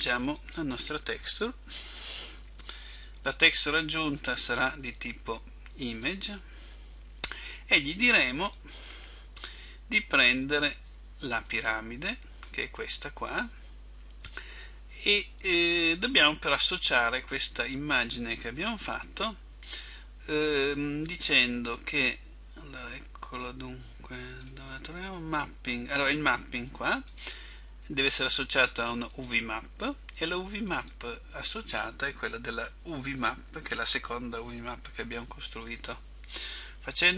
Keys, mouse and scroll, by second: 0.6 click.